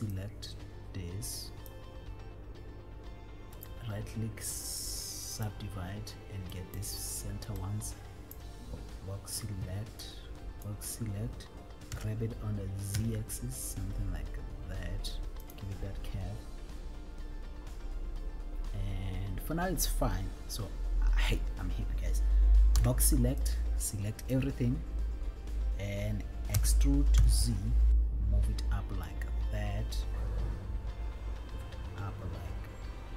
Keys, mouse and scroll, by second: 3.7-5.6 right drag, 6.8 click, 7.9 click, 10.1 click, 12.3 g, 13.4 z, 15.7 click, 22.9 b, 26.8 e, 27.5 z.